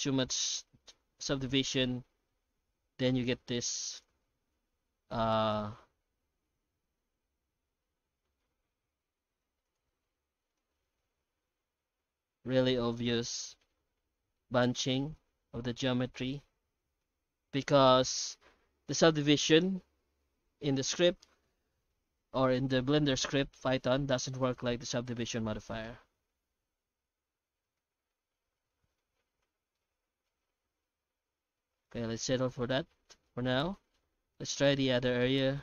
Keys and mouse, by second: 8.8 F9, 13.5-14.3 middle drag, 15.0-16.1 middle drag, 16.6-17.0 shift+middle drag, 17.4 F9, 29.7-31.8 middle drag, 32.1 shift+middle click, 32.6 right click, 32.8 Tab, 33.2 alt+shift+z, 33.7 middle click, 34.0 Tab, 34.3 right click, 34.6 Tab, 35.3 middle click.